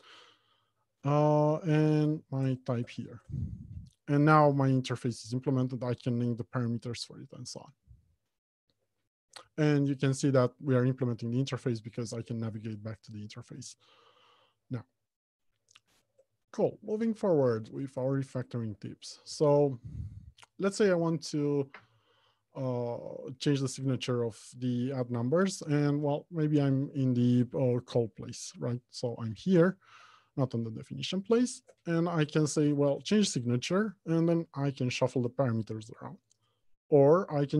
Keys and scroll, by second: 16.4 alt+Home, 16.7 Left, 17.2 Return, 27.9 ctrl+space, 28.1 ctrl+b, 29.9 Escape, 31.6 Escape, 32.0 ctrl+alt+shift+t, 33.0 ctrl+F6.